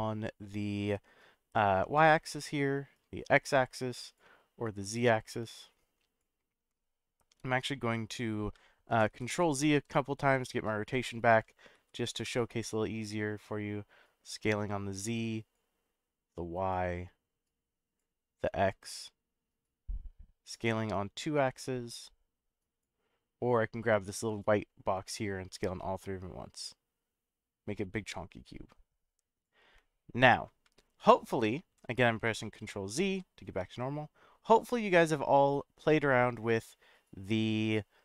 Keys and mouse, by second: 2.9-4.2 drag, 4.9-6.2 drag, 8.8-12.2 ctrl+z, 13.3-15.5 drag, 16.7-18.0 drag, 18.9-20.5 drag, 21.3-22.8 drag, 24.5-29.5 drag, 31.0-33.5 ctrl+z.